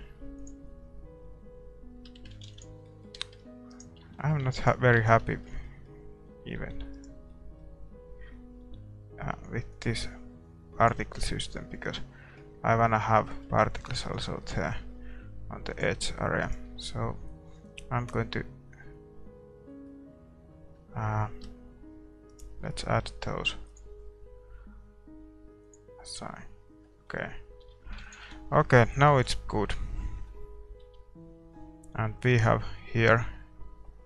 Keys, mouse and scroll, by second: 1.0-2.4 drag, 2.4 shift+z, 2.9 ctrl+s, 2.9-4.4 middle drag, 3.7 right click, 4.0 Tab, 4.4 Tab, 4.7-7.3 middle drag, 4.7-6.5 right drag, 5.0 Tab, 6.5 ctrl+r, 7.3-9.0 right drag, 8.6 ctrl+r, 9.0 middle click, 11.0-16.4 middle drag, 15.7-19.7 drag, 16.4-19.7 right drag, 19.7-22.3 middle drag, 22.3-25.7 right drag, 25.7-27.6 drag, 26.2 Tab, 26.8-32.3 middle drag, 27.6 a, 28.3 ctrl+s, 29.2 shift+z, 32.5-34.0 drag.